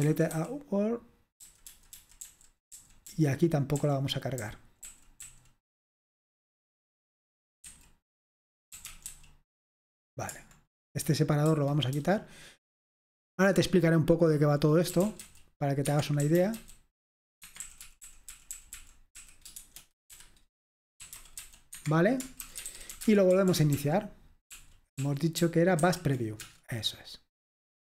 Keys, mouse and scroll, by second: 0.0-0.3 typing, 1.4-2.2 typing, 4.8-5.2 typing, 7.7-9.6 typing, 13.0-18.3 typing, 15.9 Escape, 19.4-23.4 typing, 23.6 ctrl+p, 23.8 ctrl+p, 24.6 ctrl+p, 25.0 ctrl+p, 25.4 ctrl+p, 25.8 ctrl+n, 26.7 Return.